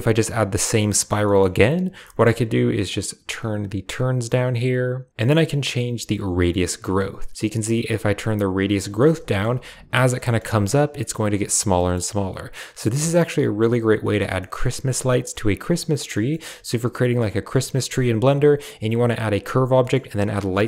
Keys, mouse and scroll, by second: 1.1 click, 1.1 middle click, 1.1 right click, 1.9 shift+middle click, 2.8-4.7 shift+drag, 5.5-8.9 shift+drag, 9.2 shift+middle click, 10.1 shift+middle click, 11.6 shift+middle click, 13.9 shift+middle click, 14.3 middle click, 16.0 shift+middle click, 16.9 shift+middle click, 19.7 shift+middle click.